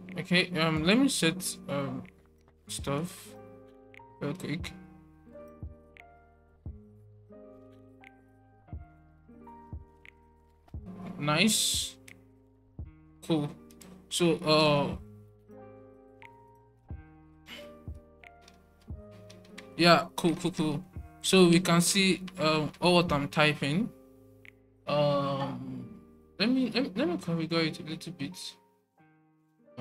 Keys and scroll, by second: 18.4 alt+super+1, 19.2 alt+super+1, 20.2 alt+super+1, 20.5 alt+super+1, 21.6 alt+super+1, 22.3 alt+super+1.